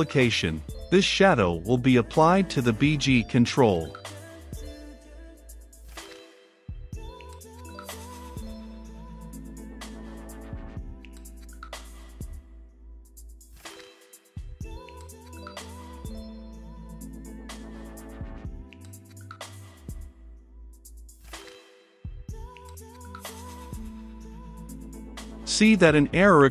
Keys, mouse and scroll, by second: 9.2 middle click, 9.5 Return, 11.1-12.2 middle drag, 12.2-16.2 drag, 17.6-18.7 drag, 18.7 Return, 19.5 click, 19.9-23.9 typing, 24.2 Return, 25.4-26.5 drag.